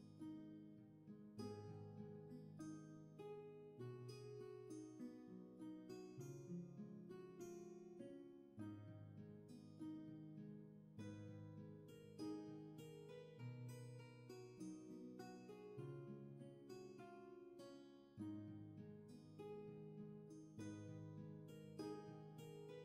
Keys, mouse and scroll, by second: 16.1 ctrl+z.